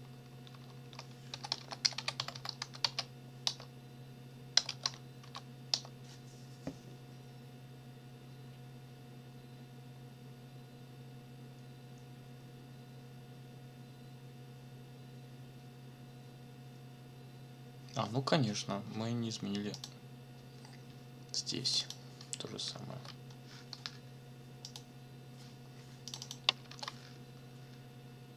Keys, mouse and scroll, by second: 1.1-2.6 typing, 2.8 Tab, 3.5 Return, 4.3-5.7 typing, 19.7 click, 21.6 click, 22.9 ctrl+v, 24.6 click, 26.1 click, 26.7 ctrl+v.